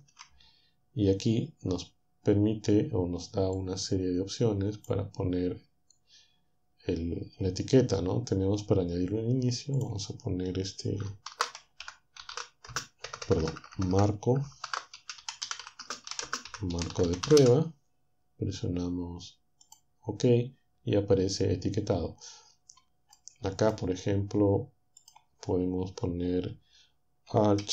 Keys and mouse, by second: 3.7-9.3 drag, 9.8-11.1 drag, 11.3-17.4 typing, 19.9-21.5 drag, 21.5-24.9 middle drag, 25.1-27.3 drag.